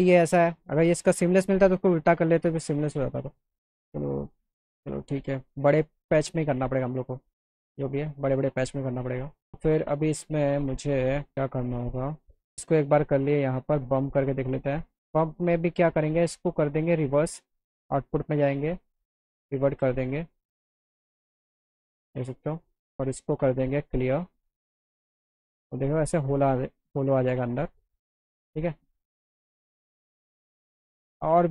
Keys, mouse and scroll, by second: 3.6 alt+click, 3.6 alt+right click, 4.2 alt+middle click, 5.5 middle click, 6.9-8.6 alt+middle drag, 9.4 alt+middle click, 11.3 click, 13.3-14.7 drag, 16.1 click, 17.7 click, 19.0 click, 20.1 click, 22.5 click, 23.8 click, 25.3 click, 25.5 click, 29.1 click, 30.5 click, 31.3 scroll down 2.